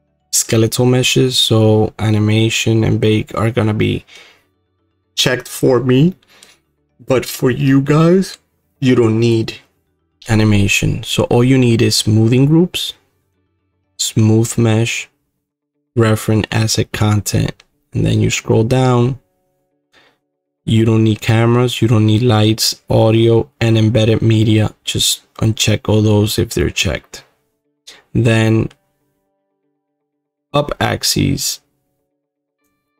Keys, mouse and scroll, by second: 7.2-12.7 middle drag, 7.2 scroll, 17.5 middle click, 17.7-23.9 scroll, 23.9 middle click, 26.2-31.6 middle drag, 32.6-32.9 drag.